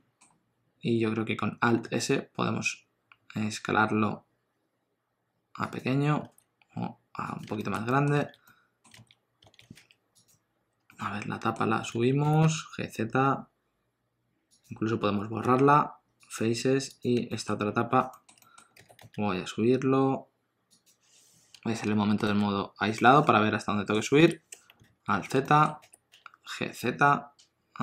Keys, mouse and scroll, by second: 1.9 alt+s, 6.2 alt+s, 7.6 shift+middle click, 7.8 middle click, 8.1 alt+z, 8.4 middle click, 8.9 alt+z, 9.4 alt+z, 9.7 3, 10.1 click, 10.9 middle click, 11.9 alt+z, 12.2 g, 15.4 x, 16.9 click, 17.2 shift+middle click, 17.5 scroll down 1, 18.1 shift+middle click, 18.4 middle click, 18.7 g, 22.9 middle click, 24.2 KP_1, 24.8 alt+z, 25.4 shift+middle click, 25.7 g.